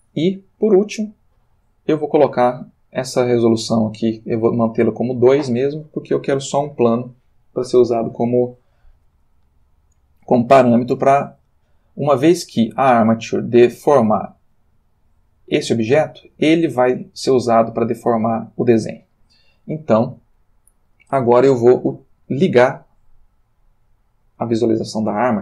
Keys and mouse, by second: 0.5 click, 13.5 click, 14.4 g, 15.8 Escape, 23.8 click.